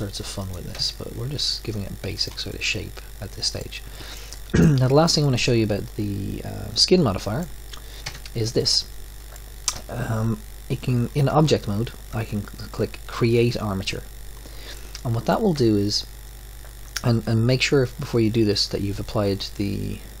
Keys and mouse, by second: 0.9 ctrl+a, 2.2 middle click, 8.0 Tab, 8.8 drag, 14.7-20.2 middle drag.